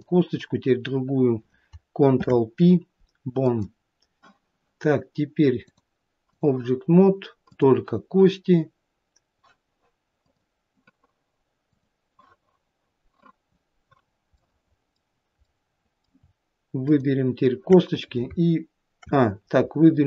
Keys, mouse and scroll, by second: 0.1 click, 2.4 ctrl+p, 5.9 click, 7.7 click, 11.9 click, 14.3-14.6 scroll down 2, 14.6 middle click, 14.9 middle click, 17.1 shift+click.